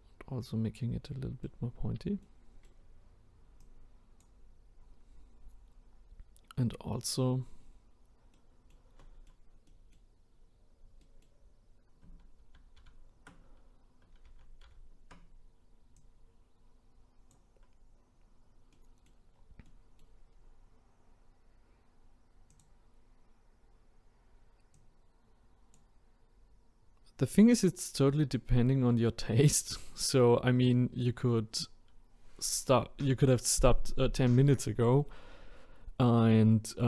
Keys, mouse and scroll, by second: 1.0 middle click, 1.7-2.2 scroll down 3, 2.2-3.6 middle drag, 3.6-4.7 drag, 4.7-5.4 scroll down 1, 5.4-6.8 scroll up 2, 7.6-8.4 scroll down 4, 8.4-10.3 middle drag, 10.3-11.0 scroll up 1, 11.0 middle click, 11.4-12.1 scroll up 1, 12.4 ctrl+z, 12.8 ctrl+z, 14.6 ctrl+z, 15.9-18.1 drag, 18.1-18.7 scroll down 3, 18.7-19.4 middle drag, 19.4 scroll down 3, 19.6-20.2 middle drag, 20.2-20.7 scroll up 3, 22.5 click, 23.0-24.7 scroll up 2, 24.7-28.9 drag, 28.9-31.9 scroll down 1.